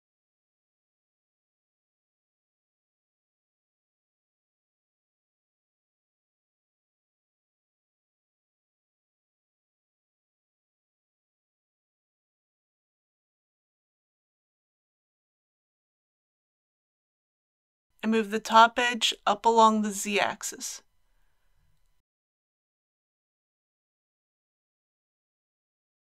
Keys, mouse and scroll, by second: 2.8 e, 4.4 x, 16.7 click, 17.4 click, 18.8 click, 20.0 e, 20.4 z, 21.9 click, 22.2 ctrl+z, 23.1 g, 23.4 z.